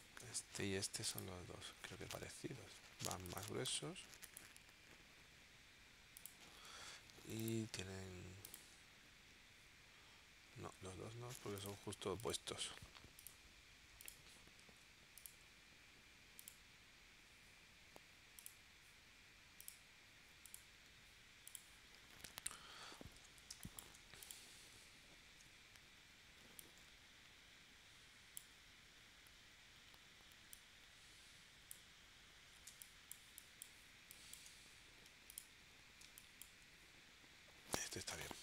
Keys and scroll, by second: 10.6 super+z, 23.5 space, 25.2 shift+w, 32.8 space, 36.0 space.